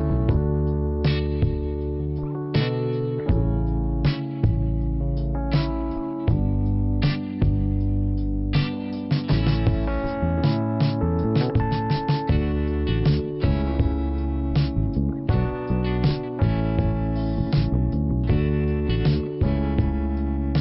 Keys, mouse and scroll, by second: 4.7-5.2 scroll down 1, 7.5 scroll up 1, 8.7 click, 9.3 click, 9.8-10.5 scroll down 1, 10.9 click, 11.3 click, 11.4 double click, 11.8-12.3 scroll down 1, 13.3 middle click, 13.9 scroll down 1, 15.1 click, 15.5 middle click, 16.4 scroll up 1, 18.3 middle click, 19.3-19.7 scroll down 1.